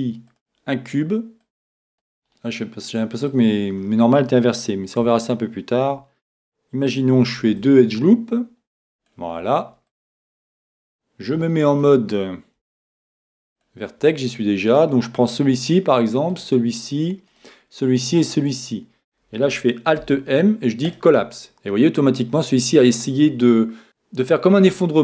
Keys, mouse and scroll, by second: 1.4 click, 1.9 Tab, 2.1-4.2 middle drag, 5.0 Tab, 7.3 ctrl+r, 10.0-11.8 drag, 11.5-13.4 middle drag, 12.8 ctrl+Tab, 14.7-20.1 right drag, 20.1 alt+m, 21.7-23.8 middle drag.